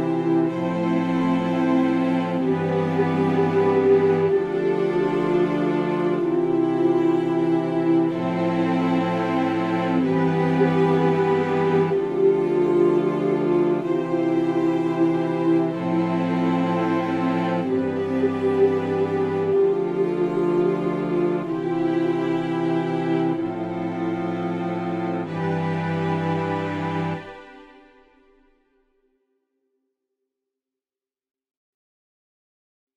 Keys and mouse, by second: 2.0 ctrl+r, 15.1-16.1 middle drag, 17.2 ctrl+r, 22.3-24.2 middle drag, 24.5 ctrl+r.